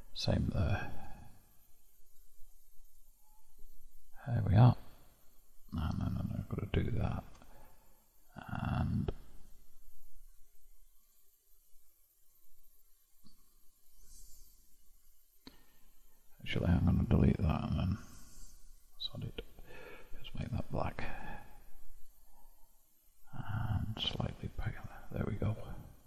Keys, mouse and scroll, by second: 1.0 click, 2.2 click, 4.6-6.2 scroll up 5, 6.4-9.4 drag, 11.1-16.8 drag, 17.0-19.8 drag, 22.6-23.9 scroll down 3, 23.9-25.6 drag, 25.6-26.0 scroll down 5.